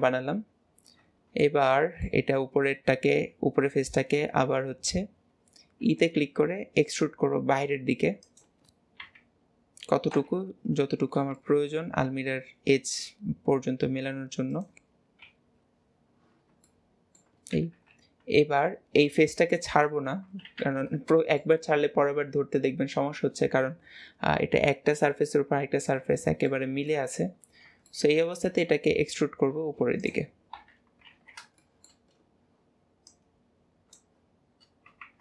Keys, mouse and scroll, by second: 0.4 scroll up 1, 0.7 scroll down 1, 0.8-1.4 scroll up 1, 1.4-4.6 middle drag, 9.1 KP_1, 10.8 scroll up 1, 11.4-12.8 shift+middle drag, 12.8 s, 15.2 KP_7, 16.7-17.8 middle drag, 18.0 KP_3, 18.6-19.2 scroll down 1, 19.2-20.4 middle drag, 21.1-22.2 middle drag, 26.5 middle click, 27.9 middle click, 30.6 KP_3, 31.2 alt+z, 31.6 shift+middle click, 32.1 scroll up 5, 33.1 shift+click, 34.3 scroll down 2.